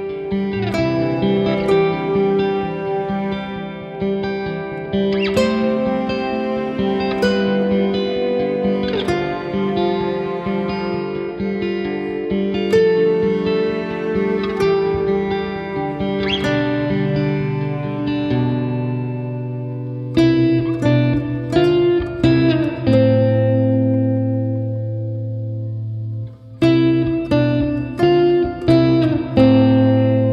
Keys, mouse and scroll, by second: 0.5 shift+right click, 0.9 shift+right click, 1.8 shift+right click, 3.3 shift+right click, 3.5-5.2 scroll down 51, 5.8 click, 5.8-6.3 scroll down 2, 6.3 click, 7.2 click, 9.0 click, 13.5 shift+d, 16.6 shift+r, 17.0 shift+r, 17.6 shift+r, 17.8 middle click, 18.6 shift+z, 19.0 middle click, 19.5 middle click, 21.6 middle click, 22.7 middle click, 23.1 ctrl+click, 23.5 click, 24.0 click, 24.2 ctrl+click, 24.7 click, 25.1 ctrl+click, 25.3 ctrl+click, 25.5 ctrl+click, 25.7 click, 26.0 middle click, 26.7 ctrl+j, 27.1 middle click, 29.0 KP_1, 29.8 shift+d.